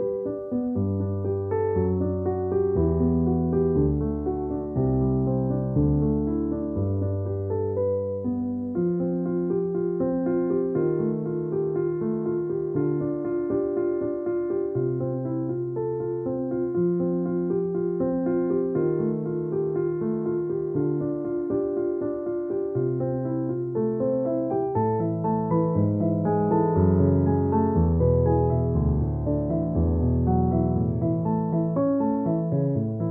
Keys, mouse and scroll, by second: 0.7 click, 2.1-2.8 typing, 3.8 ctrl+shift+f, 4.4 click, 5.4 space, 5.6 click, 5.8 space, 9.1 space, 9.3 ctrl+f, 10.1 click, 11.4 space, 11.5 click, 11.7 space, 12.1 ctrl+-, 13.2 ctrl+click, 13.4 ctrl+e, 14.4 click, 15.7 ctrl+s, 17.2 space, 18.5 space, 18.6 click, 18.8 space, 19.3 c, 23.6 v, 24.2 click, 26.4 c, 30.3 space.